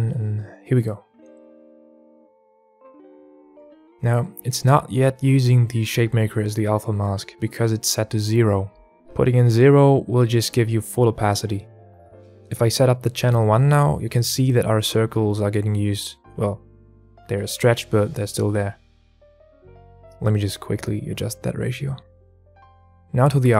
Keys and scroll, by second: 0.8 Tab, 0.8 shift+a, 11.3 Tab, 11.3 KP_1, 11.4 KP_Enter, 12.1 KP_Enter, 17.7 KP_Enter, 17.7 KP_1, 18.4 KP_Enter.